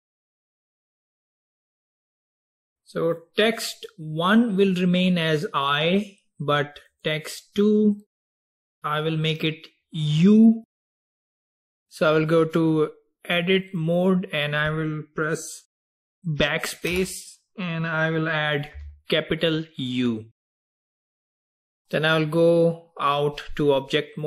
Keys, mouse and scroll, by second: 3.1 click, 7.0 click, 12.8-15.9 drag, 17.0 BackSpace, 18.8 u, 21.8-24.2 drag.